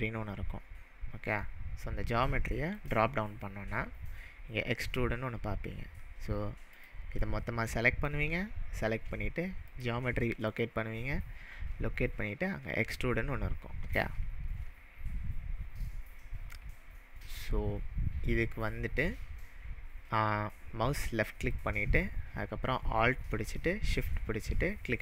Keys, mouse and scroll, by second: 2.7-5.8 drag, 6.7 click, 9.7-13.5 drag, 15.9-16.7 scroll down 2, 16.7-17.5 scroll down 1, 17.5-17.8 scroll down 1, 21.5-25.0 drag.